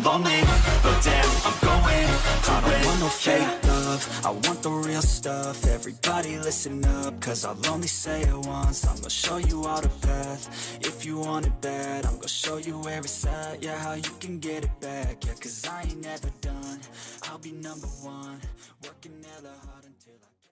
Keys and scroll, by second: 11.6 ctrl+u, 15.5 ctrl+u.